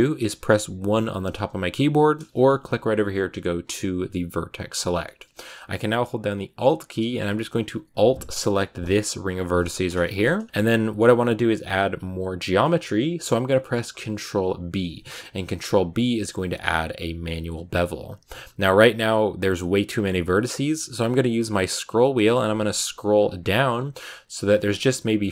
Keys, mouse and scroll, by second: 0.8 1, 3.6 click, 4.5-4.9 scroll up 1, 4.9-8.5 shift+middle drag, 8.5 alt+right click, 9.5 scroll up 1, 9.5 middle click, 10.3 scroll down 1, 10.4 middle click, 11.1-12.4 scroll up 1, 12.4 scroll down 1, 12.5-13.9 middle drag, 13.9 ctrl+b.